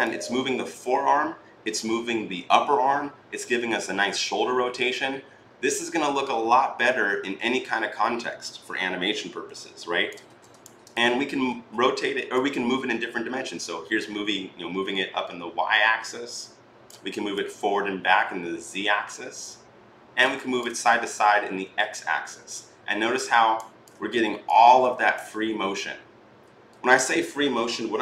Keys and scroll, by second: 10.1 ctrl+z.